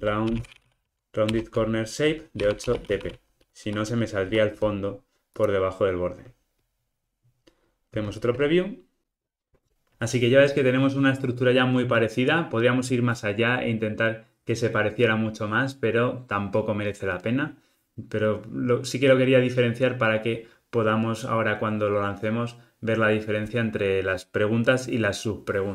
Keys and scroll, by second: 1.4 Return, 4.2 Escape.